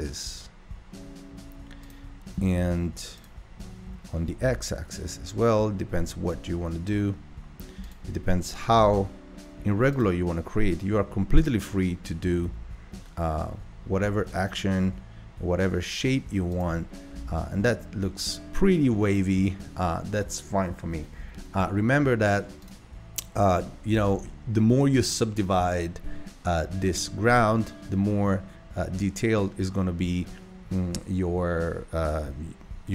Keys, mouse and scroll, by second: 3.2 click, 3.9 g, 8.3 g, 11.4 click, 12.4 g, 17.1 Tab, 22.6 click, 24.0 Tab.